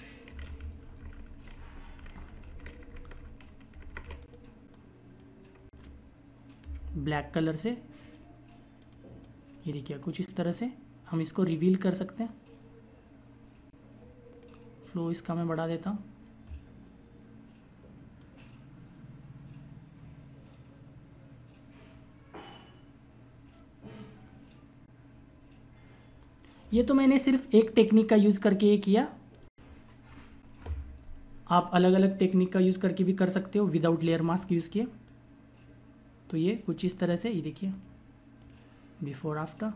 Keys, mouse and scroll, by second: 0.2-3.1 typing, 4.1 click, 6.5 x, 7.3 click, 12.9 click, 22.1 click, 33.4 shift+click.